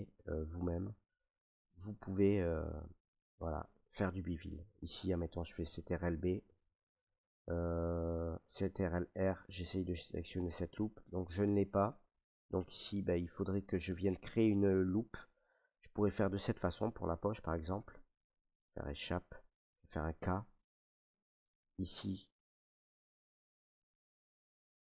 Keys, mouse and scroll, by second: 0.7 Tab, 1.2-5.7 middle drag, 5.7 ctrl+b, 6.9 right click, 8.5 ctrl+r, 10.8-13.4 right drag, 16.8 k, 18.5 Escape, 20.3 k, 21.4 click.